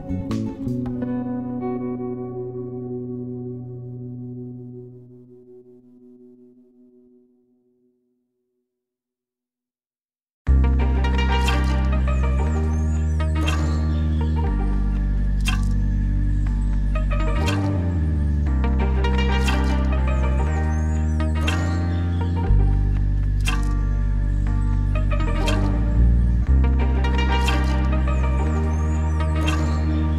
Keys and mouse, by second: 6.6-7.3 shift+middle drag, 7.9-8.9 shift+middle drag, 13.2 click, 15.5-17.8 drag, 18.0-19.2 shift+middle drag, 20.6 middle click, 21.6-22.1 shift+middle drag, 25.7-27.6 middle drag, 28.3-28.8 shift+middle drag, 28.9-30.1 middle drag.